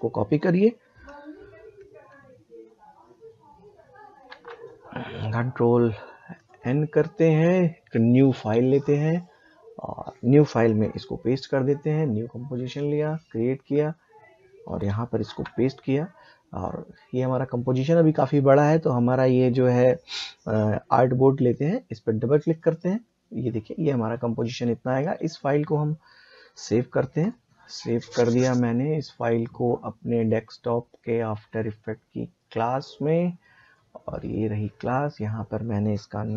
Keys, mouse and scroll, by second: 1.1 ctrl+Num_Lock, 1.1 click, 4.3 ctrl+c, 6.3 click, 11.7 click, 15.2 ctrl+v, 21.5 click, 25.3 click, 30.2 click, 32.4 click.